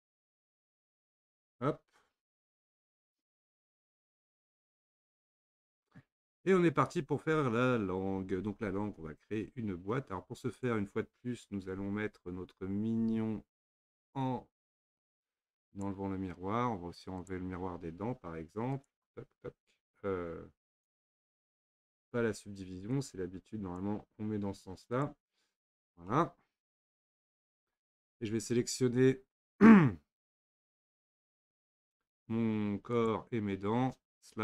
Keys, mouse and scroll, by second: 3.4 click, 3.8-6.8 middle drag, 10.6 click, 13.6 click, 15.7 click, 17.2 click, 18.8 click, 20.7 click, 23.0-23.8 drag, 25.0 click, 25.8 drag, 26.1-27.0 middle drag, 27.0 scroll down 1, 27.3-28.8 scroll up 4, 31.3 click, 33.0 shift+click.